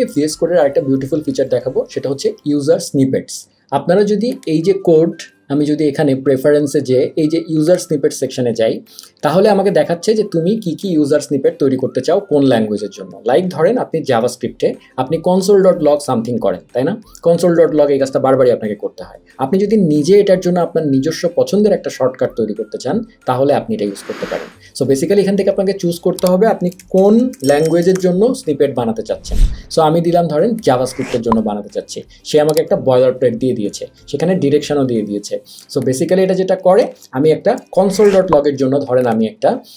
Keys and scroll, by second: 26.5-28.4 typing, 37.6 BackSpace.